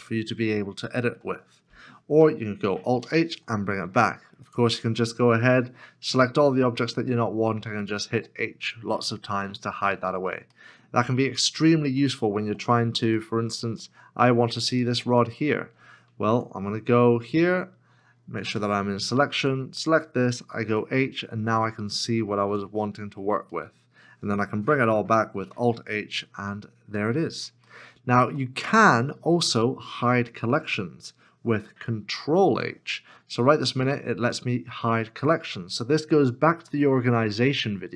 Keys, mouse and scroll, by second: 3.0 alt+h, 6.0 h, 9.1 middle click, 11.3-11.7 scroll up 1, 12.1 shift+middle click, 14.0 middle click, 16.3 Tab, 18.4 Tab, 19.4 w, 20.6 h, 22.5 KP_Decimal, 23.6 middle click, 25.4 alt+h, 26.8-27.5 scroll down 1, 27.7 shift+middle click, 29.1 middle click, 32.1 ctrl+h.